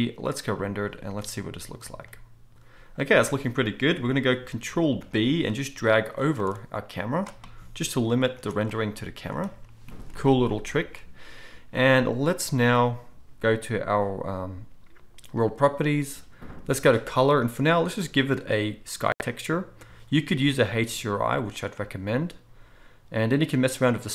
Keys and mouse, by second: 1.0-15.3 middle drag, 5.0 ctrl+b, 8.3 ctrl+b, 15.3 click, 15.4-17.4 middle drag, 17.4-24.1 drag.